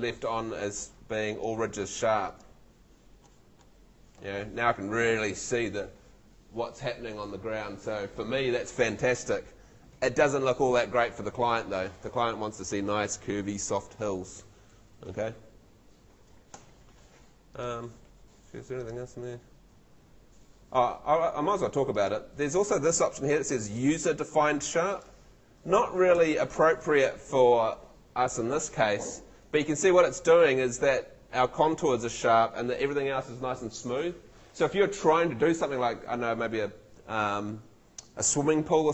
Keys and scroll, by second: 3.5 ↺, 16.5 Escape, 18.0 Escape, 26.1 Home.